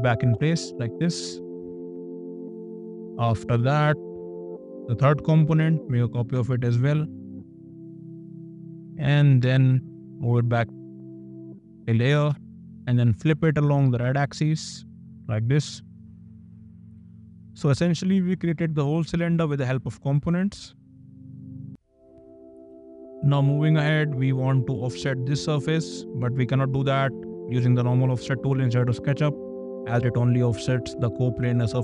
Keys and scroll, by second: 0.2 space, 5.1 m, 12.2 space, 26.0 f.